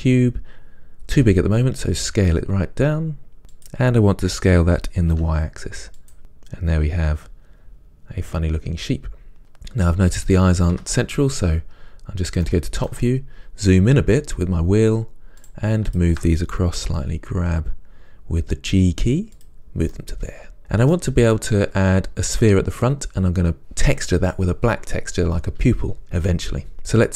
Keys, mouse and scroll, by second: 0.1 shift+a, 1.4 s, 6.2-15.6 middle drag, 10.9 KP_7, 13.2-14.0 scroll up 2, 14.0-14.6 scroll up 1, 14.6-15.6 scroll down 2, 15.6 click, 16.1 shift+click, 17.0 g, 19.6 click, 20.1-27.1 middle drag.